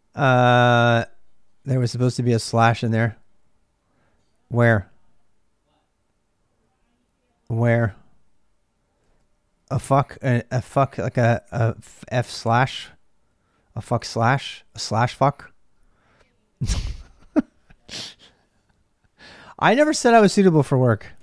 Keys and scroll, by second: 0.0-21.2 typing.